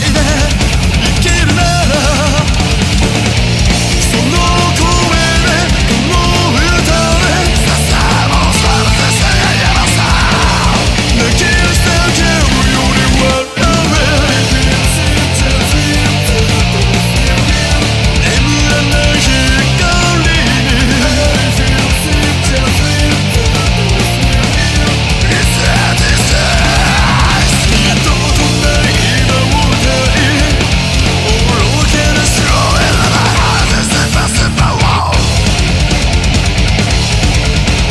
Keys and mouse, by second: 0.6 ctrl+z, 1.2 right click, 20.8 ctrl+z, 21.5 ctrl+z, 23.8 ctrl+z, 25.8 ctrl+z, 29.4 ctrl+z, 29.8 ctrl+z.